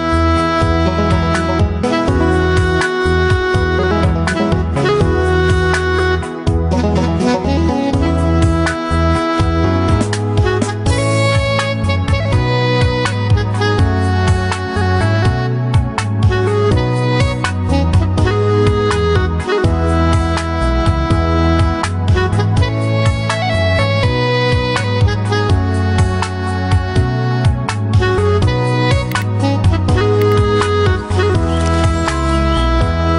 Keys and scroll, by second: 0.2 ctrl+t.